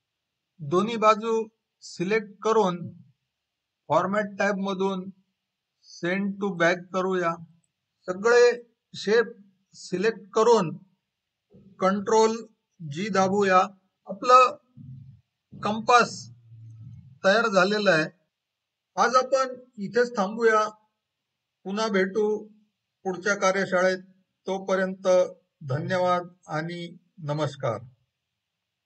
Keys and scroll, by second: 7.8 ctrl+a, 13.6 ctrl+g.